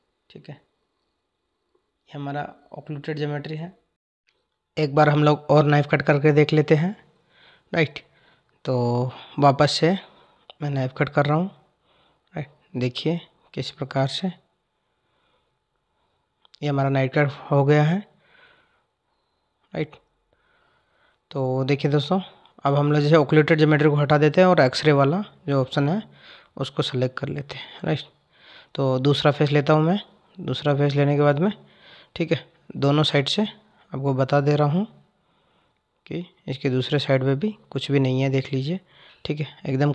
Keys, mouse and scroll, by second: 9.6-12.6 drag, 22.5 click, 29.4 click, 31.2 click, 36.9 click, 39.6 click.